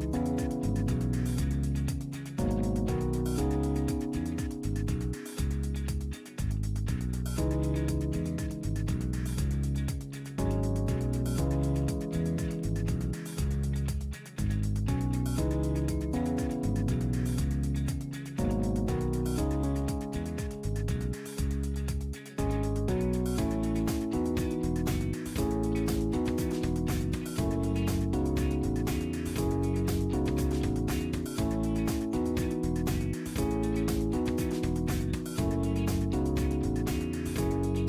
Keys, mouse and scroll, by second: 2.4 click, 3.9-4.4 scroll down 2, 6.6 click, 7.4 scroll down 1, 8.3-10.8 middle drag, 9.1-10.8 drag, 11.0 scroll up 1, 11.7-13.0 middle drag, 16.4 click, 17.6 click, 20.1 click, 21.4 KP_9, 25.2 click, 26.8-28.4 drag, 29.4 click, 30.6 KP_Subtract, 31.0 KP_4, 31.2 KP_5, 34.2-34.9 drag, 35.4 click, 36.8-37.8 middle drag.